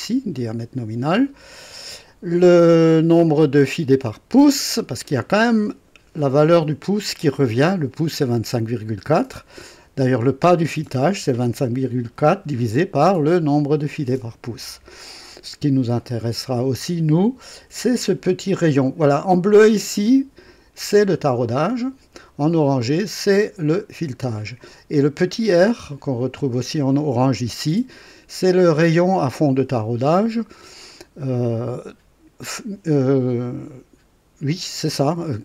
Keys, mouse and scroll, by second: 0.9 scroll up 2.